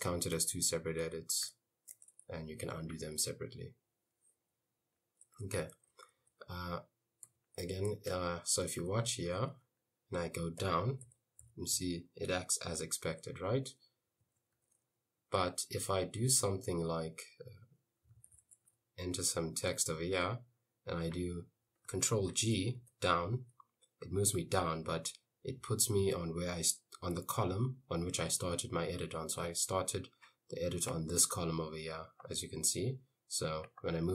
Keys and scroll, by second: 1.4 u, 5.1-7.3 typing, 8.3-10.0 typing, 10.7 Down, 11.1 Up, 11.5 Down, 11.8 Up, 14.5 Escape, 14.6 u, 15.4 i, 17.9-19.8 typing, 22.4 ctrl+g, 22.8 Down.